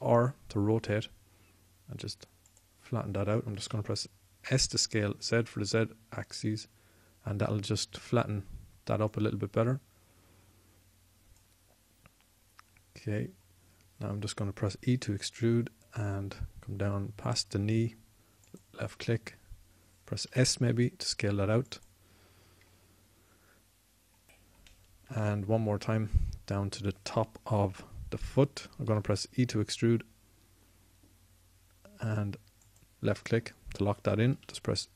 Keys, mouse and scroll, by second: 0.5 r, 3.3 click, 4.4 s, 9.9-12.1 drag, 15.5 e, 21.1 s, 29.7 e.